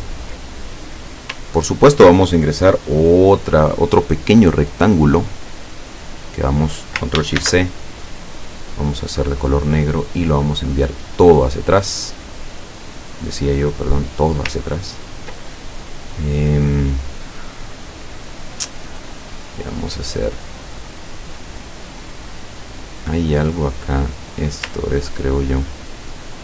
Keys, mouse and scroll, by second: 1.6 ctrl+scroll down 2, 3.7 click, 4.7-6.2 drag, 7.4 ctrl+shift+c, 9.0 click, 10.2 click, 11.6 click, 13.0 click, 13.6 click, 14.6-15.2 ctrl+scroll up 2, 15.7 ctrl+click, 17.0-18.8 drag, 19.4-21.8 drag, 23.9 click, 24.9 ctrl+scroll up 2, 25.7 ctrl+click.